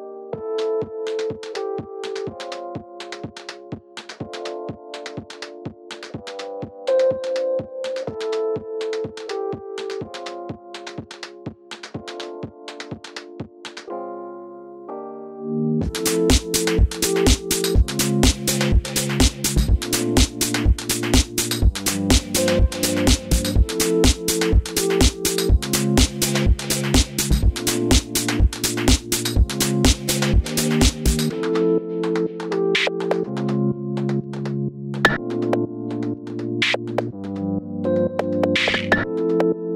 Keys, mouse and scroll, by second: 0.3 click, 0.8 click, 1.4 scroll down 1, 3.1 shift+a, 6.1 click, 6.3 Tab, 7.8 click, 8.6 g, 10.0 click, 10.8-17.1 shift+middle drag, 11.2 scroll up 1, 12.8 ctrl+z, 14.2 KP_1, 15.4 s, 17.1 g, 17.7 click, 17.8-19.1 middle drag, 18.7 i, 19.1 click, 19.8 KP_3, 21.1 e, 22.5 click, 22.7-30.6 middle drag, 23.1 scroll up 1, 26.6 ctrl+r, 30.6 click, 30.8 click, 31.1 click, 31.4 shift+click, 31.5 shift+click, 31.8 shift+click, 35.4 click, 35.7 shift+click, 35.9 shift+click, 36.6 i, 38.6 shift+click, 39.0 i.